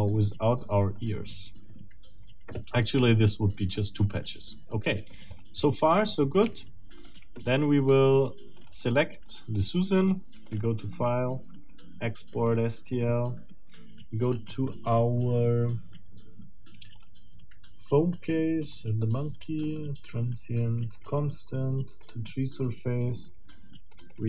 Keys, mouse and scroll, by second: 0.2 click, 1.0 middle click, 2.0 scroll down 2, 3.8-5.3 middle drag, 5.3 click, 5.6 middle click, 6.5 shift+middle click, 8.6 click, 10.5 click, 12.4 middle click, 17.0 click, 18.6 click, 19.6 click, 21.0 click, 22.0 click, 23.9 click.